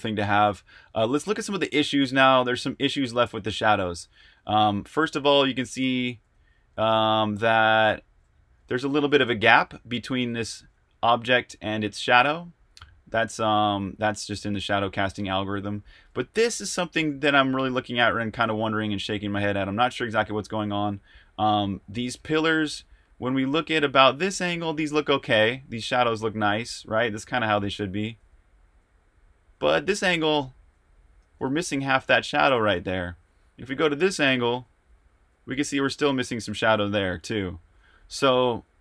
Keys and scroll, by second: 0.0-4.2 typing, 5.9-9.2 typing, 11.0-24.8 typing, 27.4-38.8 typing.